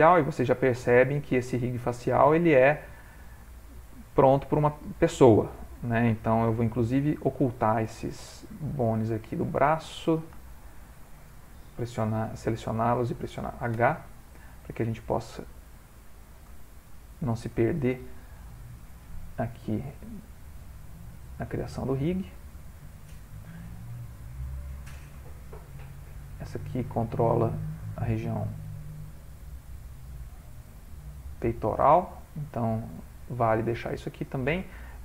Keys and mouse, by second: 0.9 shift+middle click, 1.7 ctrl+middle click, 2.2 middle click, 4.0 ctrl+middle click, 5.2 ctrl+middle click, 5.4 ctrl+middle click, 5.8 middle click, 6.6 middle click, 7.8 click, 10.5 shift+click, 12.7 shift+click, 13.8 h, 14.3 middle click, 15.9 click, 16.7 ctrl+middle click, 18.3 click, 18.9 click, 19.8 g, 20.6 click, 20.8 g, 22.4 click, 22.4 g, 23.6 click, 23.9 g, 25.5 s, 26.4 g, 27.1 middle click, 27.3 middle click, 28.2 g, 29.2 middle click, 31.5 g, 32.3 middle click.